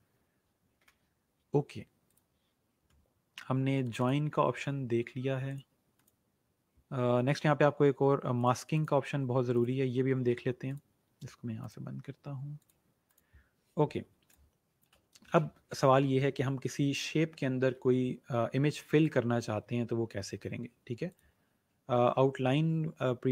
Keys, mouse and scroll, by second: 2.0 click, 8.3 click, 14.1 space, 14.2 click, 14.7 space, 18.1-18.8 alt+scroll down 2, 18.8 space, 18.9 click.